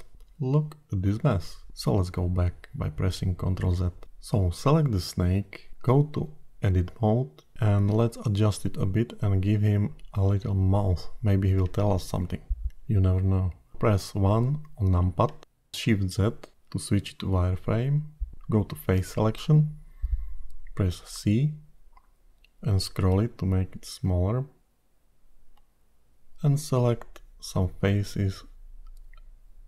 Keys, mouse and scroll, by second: 2.1 ctrl+z, 2.7 middle click, 3.3-4.9 scroll up 12, 4.9 click, 4.9 scroll up 1, 7.2 Tab, 7.9-10.2 scroll down 6, 11.0-11.9 scroll up 12, 13.1 KP_1, 15.0 shift+z, 16.2 alt+a, 19.4 click, 21.0 c.